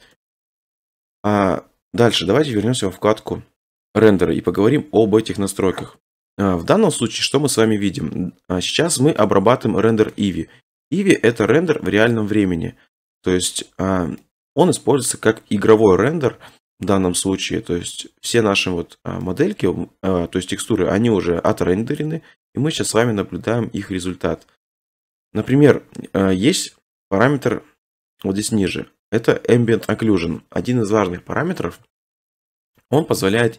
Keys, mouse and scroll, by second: 3.2-4.6 scroll, 4.6 click, 6.0 scroll, 6.1 middle click, 9.2 click, 9.3 click, 9.3 scroll, 9.5 click, 10.1 shift+middle click, 10.8 shift+middle click, 11.0 middle click, 11.2 scroll, 13.4 middle click, 14.2-15.1 middle drag, 17.0-19.1 middle drag, 24.6 scroll, 28.2-28.9 scroll.